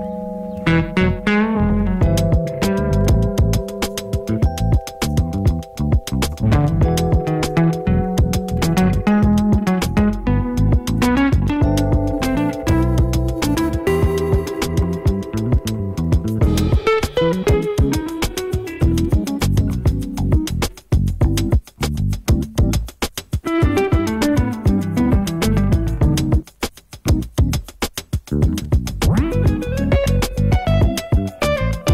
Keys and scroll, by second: 0.4 ctrl+alt+shift+Up.